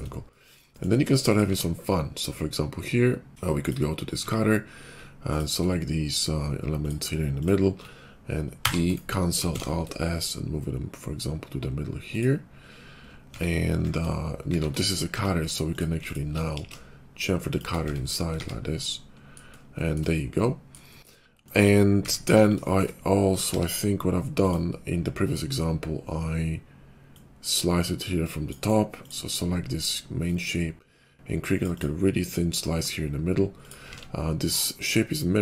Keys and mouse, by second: 0.2 middle click, 1.1 click, 1.2-3.3 middle drag, 1.4 q, 3.6-4.8 middle drag, 4.2 Tab, 5.3 alt+click, 7.7-10.0 shift+middle drag, 8.6 e, 9.5 alt+s, 10.1-12.5 drag, 13.2 Tab, 13.7 shift+2, 14.4 shift+2, 15.1 Tab, 16.0 alt+click, 16.5 ctrl+b, 17.7 Tab, 18.4 shift+2, 18.5-20.1 middle drag, 20.5 middle click, 22.3 KP_5, 23.4 d, 24.6-27.1 middle drag, 27.1-29.0 drag, 29.0-30.1 middle drag, 30.1-33.5 drag, 33.5 middle click, 33.9 alt+x, 34.8 alt+x.